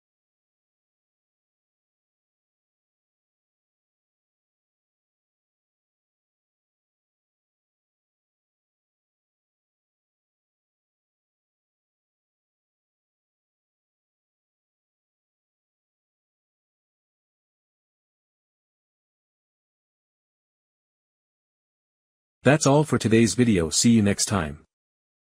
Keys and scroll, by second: 5.4 Return.